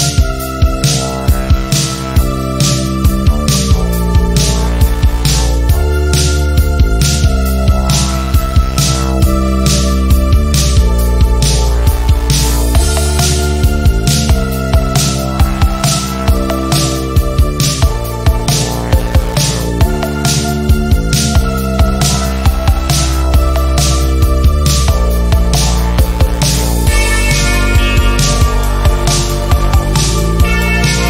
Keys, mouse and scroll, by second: 6.5 click, 11.3 Escape, 12.3 v, 13.2-14.4 drag, 18.0 shift+click, 18.7 ctrl+d, 19.3 click, 22.1 ctrl+z, 22.4-23.0 click, 23.2 ctrl+z, 23.5 click, 24.5 Delete, 25.6-26.2 click, 26.4 ctrl+z, 27.8 click, 28.5 shift+scroll down 1, 29.1 ctrl+scroll down 1, 30.1 ctrl+scroll down 1, 30.4 click, 30.5-31.0 click.